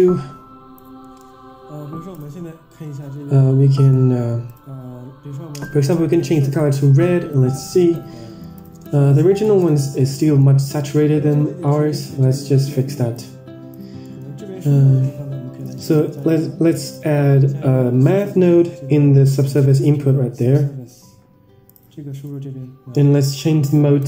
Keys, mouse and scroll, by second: 2.2 click, 2.9 Tab, 3.6 middle click, 4.4 click, 7.2 click, 8.5 ctrl+shift+click, 9.5 ctrl+shift+click, 10.2 middle drag, 10.8 Tab, 11.2-11.9 scroll down 6, 11.6 middle click, 13.1 click, 13.9 middle click, 14.5-15.3 scroll up 4, 15.7 middle click, 16.0 shift+a, 22.2-23.2 drag, 23.9-24.0 drag.